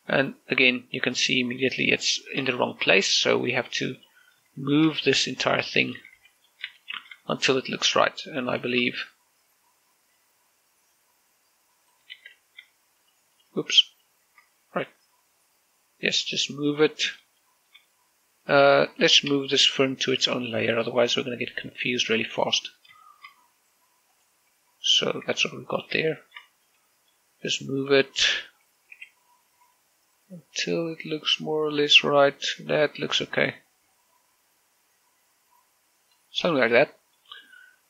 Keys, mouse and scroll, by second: 0.4 shift+middle click, 0.6-3.5 middle drag, 4.8 click, 5.4 shift+middle click, 6.4-7.0 typing, 7.0 click, 7.6 shift+middle click, 9.4 shift+click, 11.0 click, 12.9 ctrl+z, 13.8 shift+right click, 15.8-18.2 drag, 18.2 shift+middle click, 18.7 scroll up 1, 20.9 m, 23.0 click, 23.8 shift+middle click, 24.9 click, 26.5 shift+click, 26.9 shift+middle click, 27.4 middle click, 28.0 scroll up 1, 29.7 g, 30.3 x, 36.8 click, 37.2 scroll down 1, 37.5 middle click.